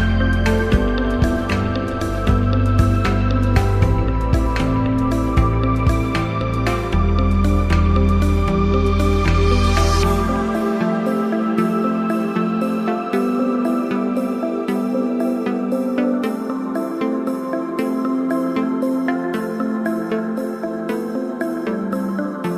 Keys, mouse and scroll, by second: 4.5 click, 9.1 click, 10.5 click, 13.3 shift+click, 19.7 click.